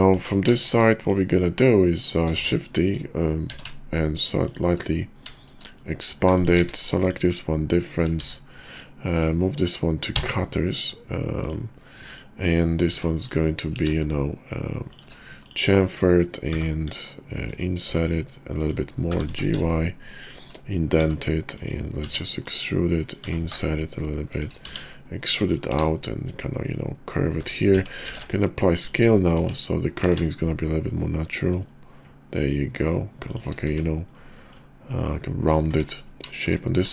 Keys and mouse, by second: 0.1 Tab, 0.5 shift+drag, 2.3 shift+d, 3.4 s, 5.4 shift+click, 5.7 click, 6.3 shift+click, 7.0 q, 8.2 shift+2, 10.1 m, 12.8 Tab, 13.6 ctrl+b, 16.5 i, 17.8 i, 19.0 g, 20.8 i, 22.0 e, 23.2 i, 24.6 e, 25.6 ctrl+b, 27.7 Tab, 28.1 ctrl+a, 29.3 Tab, 29.9 ctrl+b, 33.6 Tab, 34.1 click, 35.2 drag, 35.7 `, 36.3 shift+drag.